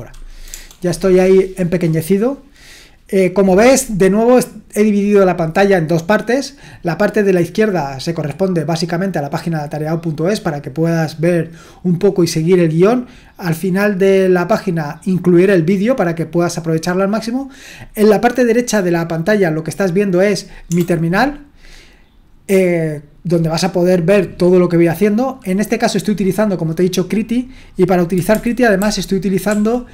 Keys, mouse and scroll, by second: 0.5 BackSpace, 20.7 BackSpace, 28.8 ctrl+shift+Left, 29.5 ctrl+shift+Right.